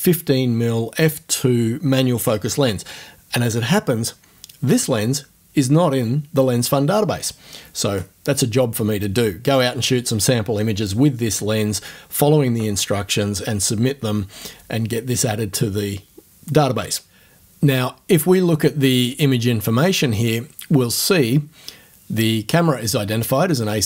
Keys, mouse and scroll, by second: 19.0 click.